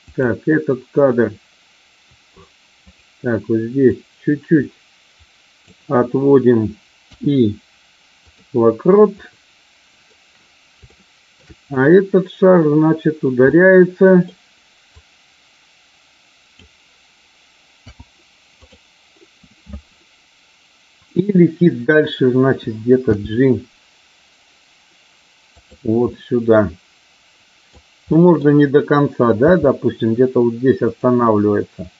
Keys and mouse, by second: 0.0 click, 2.9 click, 4.0-5.6 drag, 9.2 middle click, 10.9 shift+middle click, 13.4-14.1 middle drag, 14.9-16.5 drag, 23.0 g, 25.5 click, 26.1-27.6 middle drag, 28.0 middle click, 29.4 g, 31.1-31.9 middle drag.